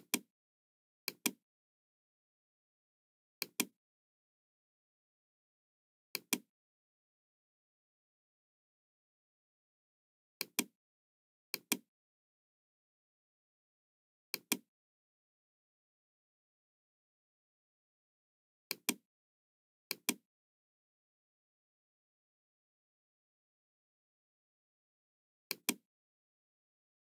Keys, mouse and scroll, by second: 1.0 click, 3.3 click, 5.2 scroll down 1, 6.1-7.5 drag, 8.7 scroll up 1, 10.3 click, 11.5-12.5 drag, 13.9 middle click, 14.3 click, 14.8-17.3 middle drag, 18.6 click, 19.9 click, 20.8 scroll down 1, 21.6-21.9 scroll up 2, 22.0 scroll down 2, 23.2-23.5 scroll up 2, 23.7 scroll down 2, 25.4 click.